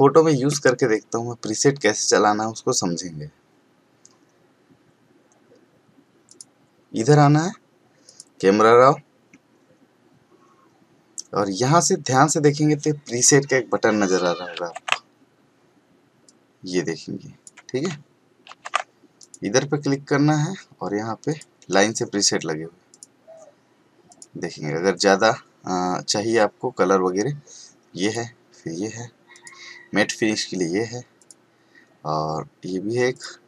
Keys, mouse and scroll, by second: 6.3 click, 14.2 ctrl+shift+Num_Lock, 19.2 click, 21.3 click, 28.0 click, 31.8 click, 33.1 click.